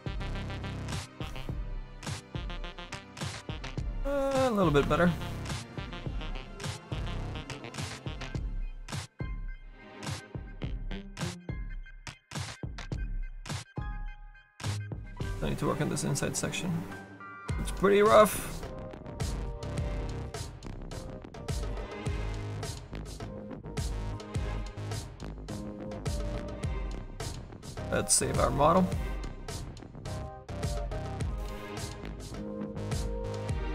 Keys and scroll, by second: 9.5 s, 10.7 s, 11.7 s.